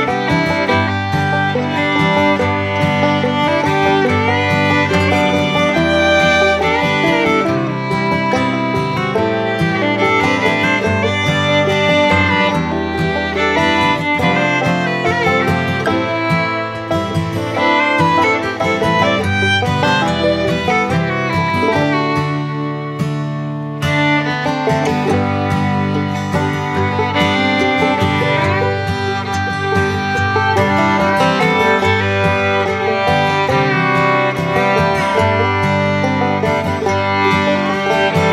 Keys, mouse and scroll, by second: 3.4 click, 7.1 shift+click, 8.6 ctrl+z, 10.4 click, 13.1 click, 24.7 click, 25.4-30.1 drag, 31.6-34.8 drag, 35.1-38.3 drag.